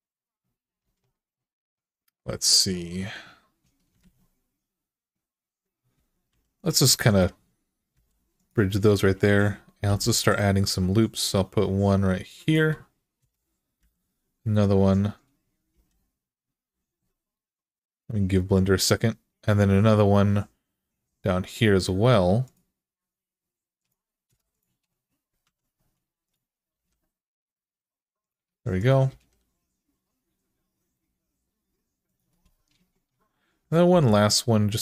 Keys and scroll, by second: 0.6 alt+z, 3.8 alt+z, 6.1 2, 7.7 f, 9.6 k, 13.0 Return, 13.6 k, 15.5 k, 24.1 Return, 25.2 1, 26.5 g, 28.9 g, 33.7 k.